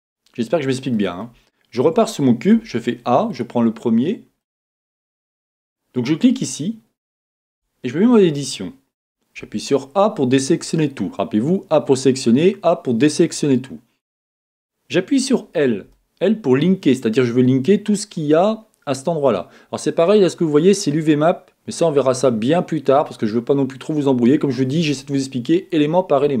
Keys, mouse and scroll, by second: 0.0 click, 0.9-3.3 middle drag, 2.5 a, 3.3 click, 4.4-5.5 middle drag, 5.5-7.6 scroll up 2, 7.6 Tab, 9.4-26.4 middle drag, 11.0-11.4 scroll down 2, 11.4 scroll up 1.